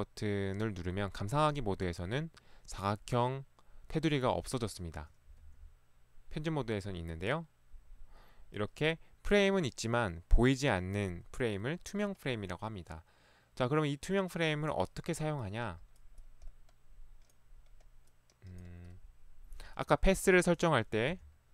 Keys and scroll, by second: 5.5 Escape, 21.2 p.